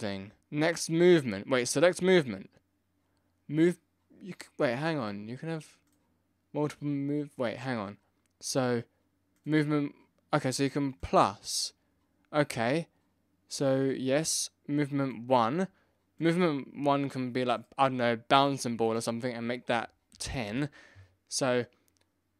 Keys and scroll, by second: 20.1 0.